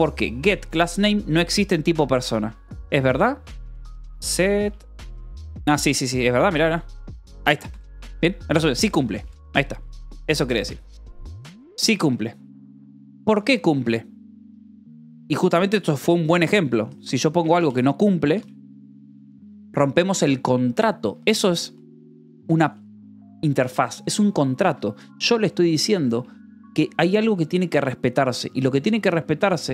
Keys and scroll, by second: 2.6 Escape, 3.2-5.4 typing, 6.8 r, 7.2 Escape, 7.9 j, 9.1 j, 10.0 Escape, 10.6-13.4 typing, 13.6 Escape, 15.9-17.6 typing, 18.1 ctrl+s, 18.7 shift+v, 19.4 Escape, 20.9 k, 21.4 l, 22.8 v, 23.5 e, 24.4 Escape, 25.1 h, 29.4 j.